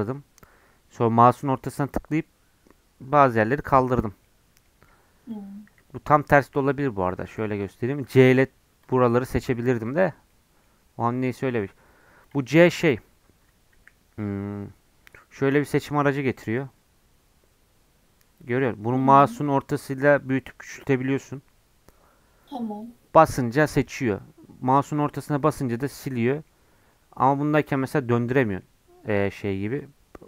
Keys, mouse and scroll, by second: 4.2 middle click, 4.8 s, 5.7 s, 7.1 a, 7.3 a, 7.6 middle click, 8.1 c, 12.8 click, 13.7 c.